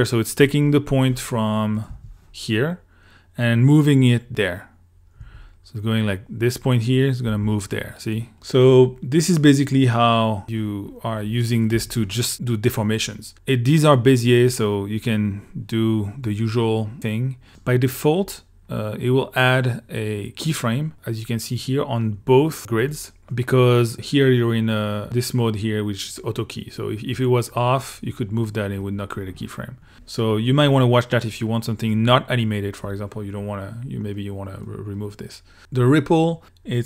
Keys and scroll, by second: 1.9 l, 4.3 2, 5.2 l, 7.3 2, 11.7 i.